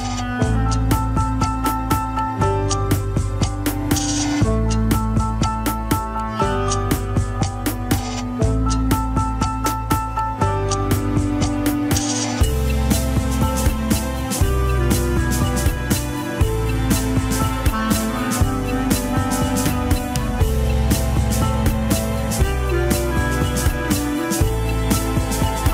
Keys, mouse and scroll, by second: 0.9 KP_1, 1.1-1.7 scroll up 1, 1.7 ctrl+s, 1.9 scroll down 3, 2.2-3.6 shift+middle drag, 3.6 KP_1, 3.8-4.6 scroll up 3, 4.0 shift+middle click, 4.6 ctrl+Tab, 4.7 scroll down 2, 4.9 shift+middle click, 5.5 ctrl+s, 6.7 click, 7.3 click, 8.7 click, 9.1 click, 10.1 click, 10.9 click, 11.4 click, 12.3 click, 12.6 shift+click, 13.3 click, 14.4 click, 14.7 F2, 15.7 click, 16.1 F2, 21.1 click, 21.8 click, 23.8 click.